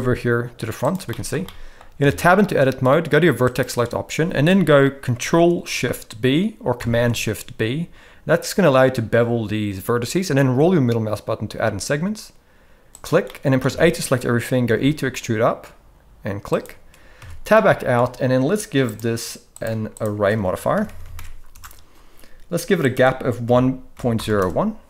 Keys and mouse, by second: 1.1 middle click, 1.4-1.8 shift+middle drag, 2.0 Tab, 3.5 click, 6.8 ctrl+shift+b, 13.3 middle click, 13.6 a, 14.6 e, 17.2 Tab, 17.5-18.0 middle drag, 18.8 click, 19.5-21.5 drag, 20.8 r, 22.8-24.4 drag.